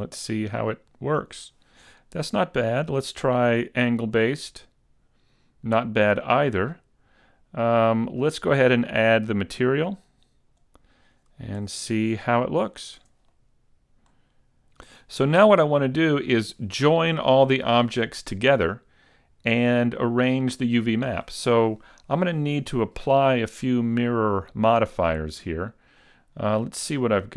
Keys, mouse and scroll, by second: 0.8-1.3 scroll up 1, 1.3 scroll up 1, 2.0 shift+middle click, 3.1 click, 4.5 scroll down 3, 6.2 middle click, 9.5 click, 11.1-11.6 scroll down 1, 11.6 a, 12.0-12.3 scroll down 3, 12.3 middle click, 13.0 Tab, 13.2 scroll up 1, 13.3 middle click, 26.6 click.